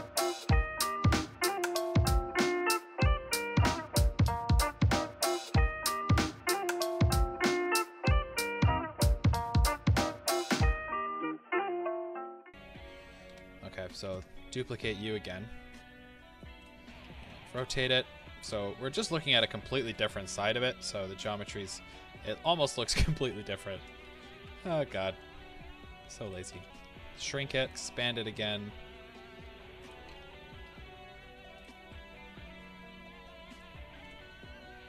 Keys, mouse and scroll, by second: 0.1 drag, 0.3 middle click, 0.9 s, 1.3 click, 1.4-2.1 middle drag, 2.1 scroll, 2.6 middle click, 2.9 click, 3.2 KP_7, 3.7 g, 3.9 click, 3.9-4.6 middle drag, 4.2 KP_1, 4.6 click, 4.9 middle click, 5.3 click, 5.5 g, 5.8 click, 5.9-6.5 middle drag, 6.5 g, 6.6 click, 7.6 click, 7.8 r, 8.1 click, 9.0 r, 9.3 click, 9.3 g, 9.5 click, 9.6-11.8 middle drag, 11.8 click, 12.1 scroll down 1, 12.2-16.6 shift+middle drag, 12.4 KP_1, 13.3 KP_3, 14.0 shift+d, 16.6 click, 17.2 KP_3, 18.1 r, 19.2 click, 23.8 s, 26.3 click, 26.5 s, 27.6 click, 27.7 s, 29.8 click, 30.1 g, 31.6 click, 31.8-34.8 middle drag.